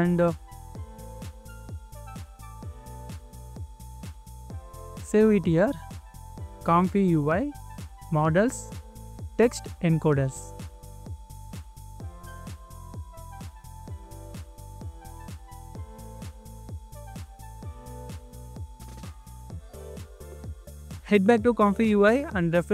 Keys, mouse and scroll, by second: 0.9 ctrl+c, 1.0 typing, 6.5-7.1 scroll down 1, 7.1-7.5 scroll up 1, 7.5-9.6 scroll down 1, 10.7 double click, 11.7 right click, 20.3-21.3 scroll down 1.